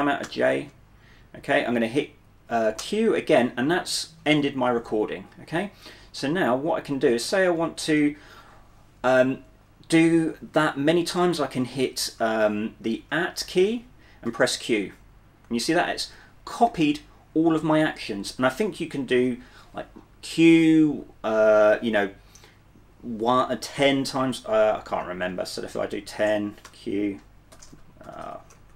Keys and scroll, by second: 0.1-0.8 typing, 2.9 typing, 7.0-8.2 typing, 13.4 @, 14.4 q, 15.4-16.1 typing, 24.9-28.7 typing.